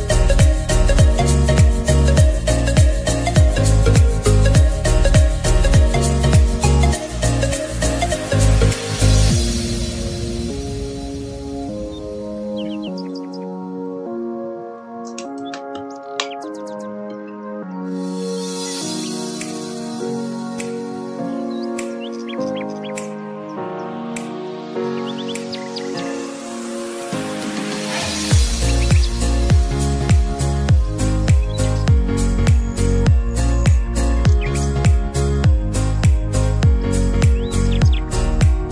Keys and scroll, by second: 25.1 ctrl+z.